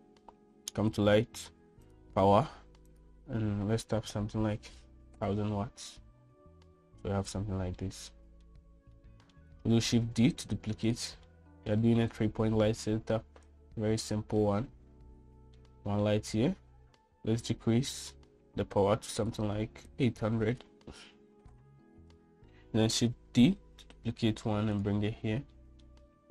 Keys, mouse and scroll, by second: 0.1 shift+middle click, 2.7-6.8 drag, 5.0 0, 8.5-9.2 middle drag, 9.7-10.1 shift+middle drag, 10.7 shift+d, 12.0 middle click, 14.2-15.3 drag, 16.3-17.2 middle drag, 18.7-23.0 drag, 24.0 shift+d.